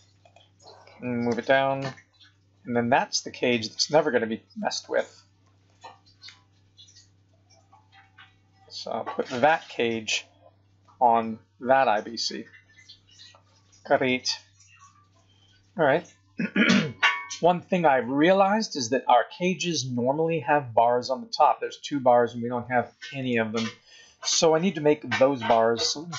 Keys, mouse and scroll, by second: 1.2 g, 5.4 g, 9.5-10.0 scroll up 9, 10.8 middle click, 14.2-14.6 scroll down 3, 14.6 scroll up 5, 16.4-16.8 scroll down 2, 17.4 middle click, 23.2 click.